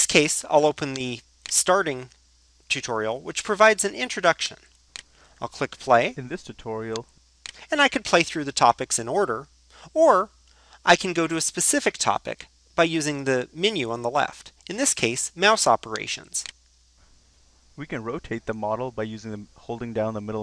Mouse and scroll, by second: 17.9-18.4 drag, 18.9-20.4 middle drag.